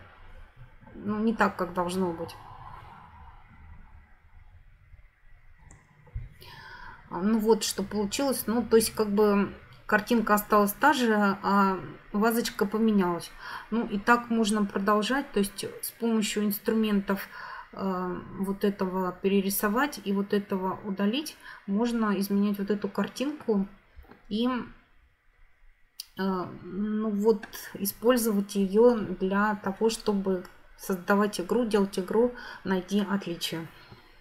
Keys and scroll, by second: 5.7 F9.